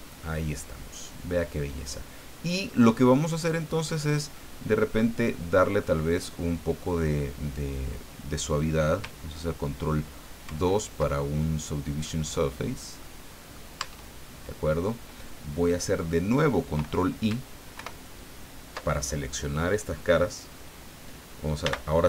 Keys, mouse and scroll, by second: 0.2-2.9 middle drag, 3.4 scroll down 2, 4.3-6.0 middle drag, 10.4 ctrl+2, 11.6 scroll down 2, 12.0-13.7 middle drag, 13.8 Tab, 17.7 ctrl+i, 21.6 n.